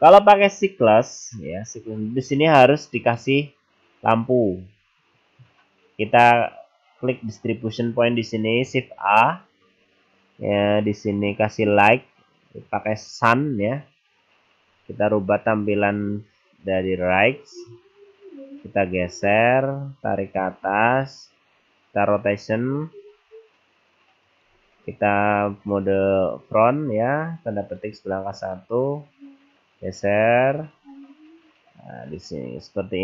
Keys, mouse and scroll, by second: 3.2 middle click, 4.3-4.7 scroll down 2, 4.7-5.2 scroll up 2, 5.2 scroll down 2, 7.1 click, 9.0 shift+a, 17.8 scroll up 3, 18.6 click, 20.3 click, 22.3 r, 23.2 r, 25.4 `, 29.8 click, 31.5 r.